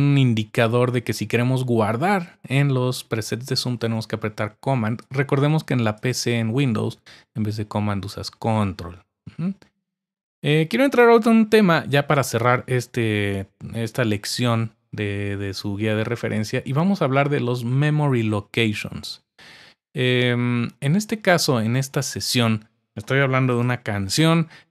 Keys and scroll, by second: 23.5 Return.